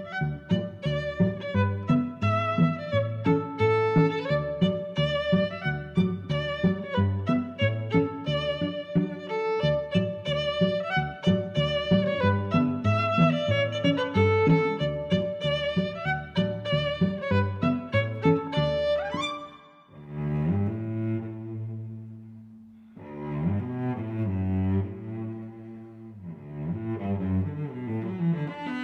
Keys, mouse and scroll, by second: 0.6 z, 1.1 click, 1.4 click, 2.4 click, 2.6 click, 6.0 shift+super+b, 8.8 click, 10.0 click, 11.1 click, 11.3 click, 11.4 click, 14.6 middle click, 16.1 click, 16.8 click, 17.3 shift+Delete, 17.9 7, 18.3 Return, 19.6 click, 20.4 click, 20.9 Delete, 21.0 Delete, 21.0 1, 21.1 Return, 22.2 click, 22.3 click, 22.7 click, 23.2 Left, 23.3 Delete, 23.5 0, 23.7 8, 23.8 Return, 24.9 click, 25.5 click, 26.0 Delete, 26.1 9, 26.2 Return, 27.5 click.